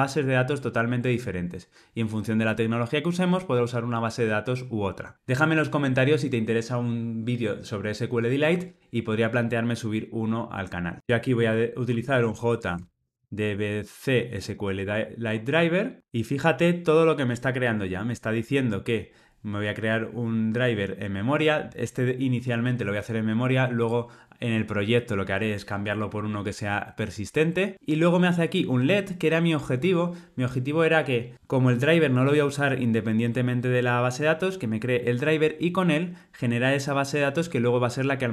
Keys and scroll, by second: 14.8 Tab.